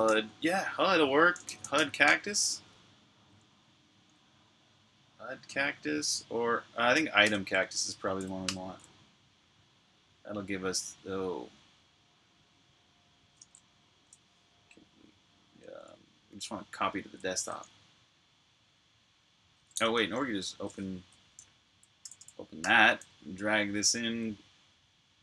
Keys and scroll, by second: 1.0-1.8 typing, 1.9 Tab, 3.7 Tab, 6.4 Tab, 7.1 Return, 7.3 f, 8.0 BackSpace, 9.1 Return, 15.5 super+w, 15.9 super+Tab, 19.4-21.5 typing, 23.8 ;.